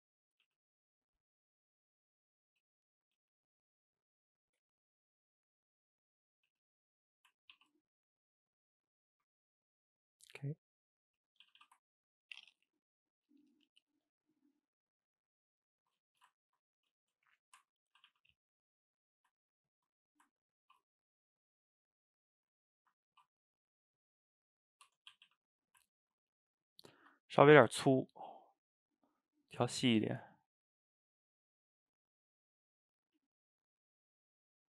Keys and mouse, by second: 0.2 shift+click, 0.5 g, 2.9 shift+click, 3.2 g, 4.5-6.5 middle drag, 6.5 g, 7.0-7.5 middle drag, 7.5 ctrl+t, 8.6-11.2 middle drag, 11.2 Tab, 11.5 a, 11.6 a, 11.8-15.4 ctrl+middle drag, 16.2 shift+right click, 16.4-16.8 ctrl+middle drag, 16.8 drag, 17.0-17.6 shift+middle drag, 17.6 Tab, 18.0 a, 18.1 a, 18.6 click, 18.8-19.4 middle drag, 19.4 ctrl+right drag, 20.0-20.6 middle drag, 20.6 ctrl+t, 22.4 click, 22.6 middle click, 23.1 ctrl+t, 24.7 middle click, 24.9 Tab, 25.2 a, 25.3 a, 25.9-27.3 ctrl+middle drag, 27.3 click, 27.6 shift+right click, 27.8-28.8 ctrl+middle drag, 28.8 drag, 29.6 middle click, 30.4-33.4 shift+drag.